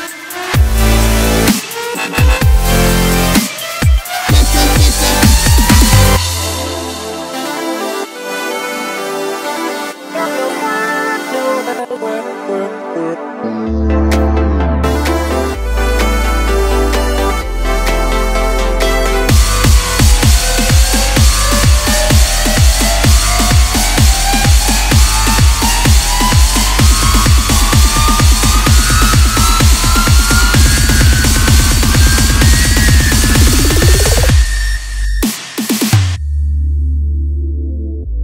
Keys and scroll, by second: 7.3 s, 15.2 0, 18.9 g.